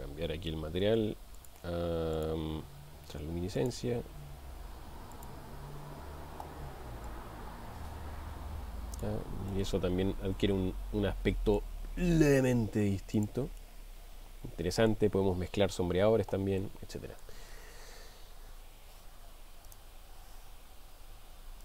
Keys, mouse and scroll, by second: 2.2-3.9 drag, 5.2 click, 9.6-11.7 middle drag, 13.2 click, 13.9-15.2 middle drag, 16.9 middle click.